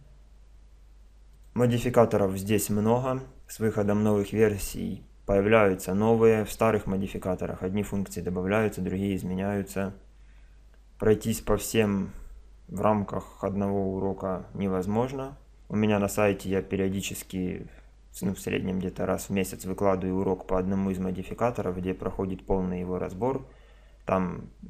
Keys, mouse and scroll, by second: 1.3-3.1 drag.